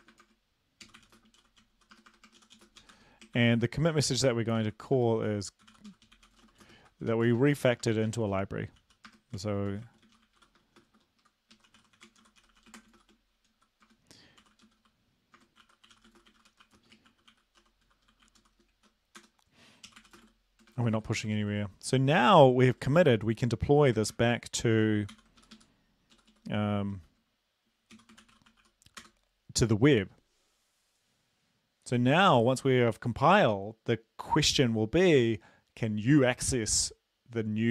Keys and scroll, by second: 0.0-21.4 typing, 3.4 ctrl+l, 11.2 Left, 11.6 Right, 24.1 ctrl+c, 25.1 ctrl+l, 25.4 Up, 25.6 Up, 26.4 Down, 27.0 ctrl+r, 28.0-28.6 typing, 29.0 Return.